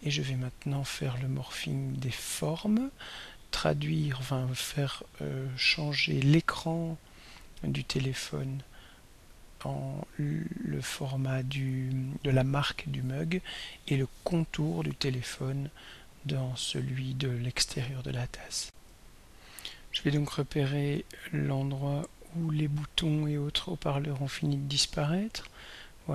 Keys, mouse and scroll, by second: 9.4 click, 10.7 click, 15.6 click, 18.7 r, 21.6-26.1 drag.